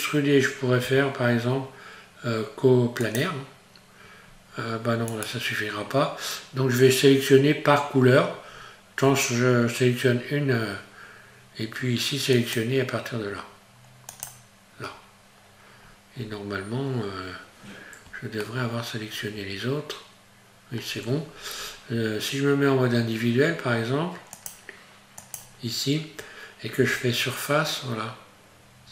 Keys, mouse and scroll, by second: 0.8 q, 4.2 scroll up 1, 5.1 right click, 8.5-9.0 scroll up 1, 12.3 click, 14.9-15.9 scroll down 1, 15.9-16.2 scroll up 1, 18.4 shift+middle click, 19.7 scroll up 1, 20.7-21.1 scroll down 1, 21.6-22.8 scroll up 1, 24.4 click, 26.8 s.